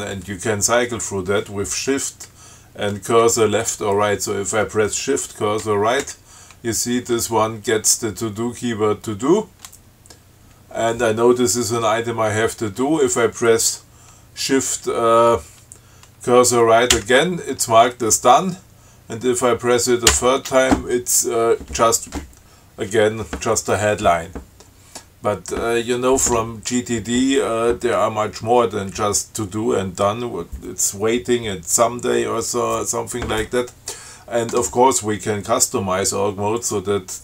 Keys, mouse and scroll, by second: 6.3 shift+Right, 17.1 shift+Right, 20.3 shift+Right, 36.8 click.